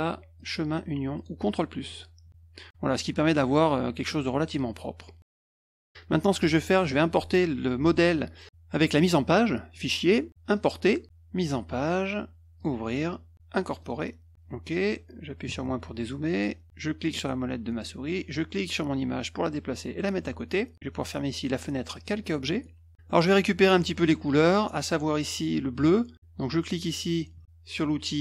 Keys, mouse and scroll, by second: 0.3 click, 1.1 click, 1.9 click, 4.2 middle click, 5.2 -, 5.6 middle click, 9.7 click, 10.5 click, 12.5 click, 13.8 click, 15.5 -, 15.6 -, 17.0 middle click, 18.3-19.9 drag, 21.9 click, 22.5 middle click, 23.0 middle click, 23.3 middle click, 26.2 F2.